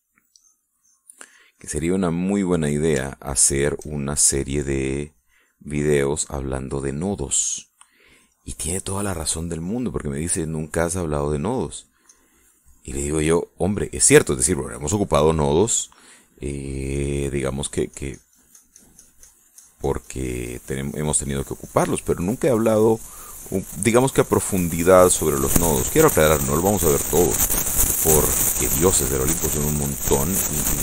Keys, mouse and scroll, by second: 0.4 click, 1.0-2.6 drag, 2.6 middle click, 3.2 middle click, 4.2 shift+middle click, 5.4-6.8 drag, 7.0-8.6 middle drag, 8.9-10.6 drag, 10.7 middle click, 11.4 middle click, 12.8 click, 14.4 click, 17.7-20.2 drag, 26.6-28.2 drag, 28.2 middle click, 29.0-30.8 drag.